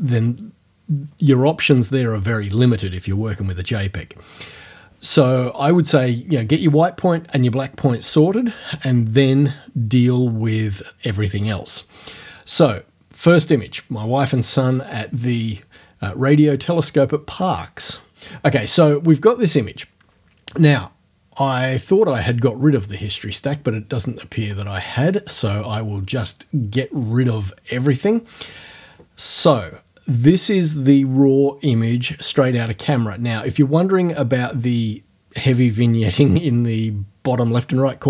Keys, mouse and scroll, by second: 23.1 click, 24.5 click, 24.7-29.5 middle drag.